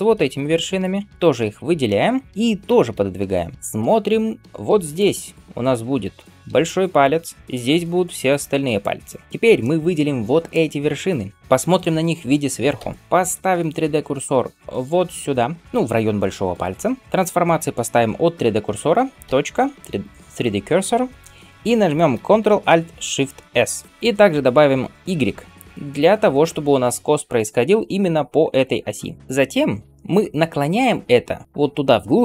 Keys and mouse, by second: 2.6 g, 3.6 KP_7, 4.5-9.2 d, 4.8-9.2 drag, 9.2-14.8 right drag, 11.1-17.8 drag, 11.1-17.8 middle drag, 12.6 KP_7, 23.6 ctrl+alt+shift+s, 24.4-32.2 drag, 31.3-32.2 middle drag.